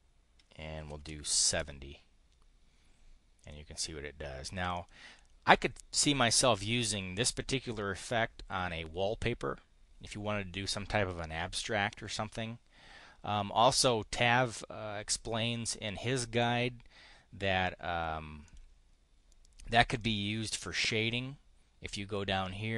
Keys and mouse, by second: 0.5-1.4 typing, 1.4 Return, 3.3 click, 4.6 click, 18.4 click, 20.0-22.7 drag.